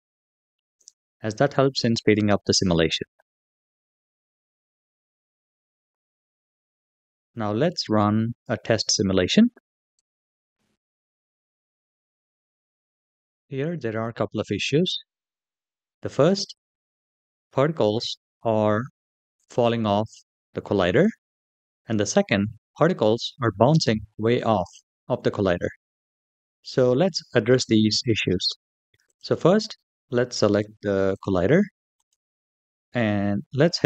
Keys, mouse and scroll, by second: 3.0-3.9 scroll down 3, 3.9-5.4 scroll up 2, 5.6 click, 9.7 click, 13.2 space, 14.0-14.8 middle drag, 15.2-15.8 scroll up 3, 16.0 shift+middle drag, 16.6-17.1 scroll up 2, 22.2-25.3 scroll down 2, 28.9 click, 30.0-30.9 scroll down 3, 30.9 click, 31.8 click.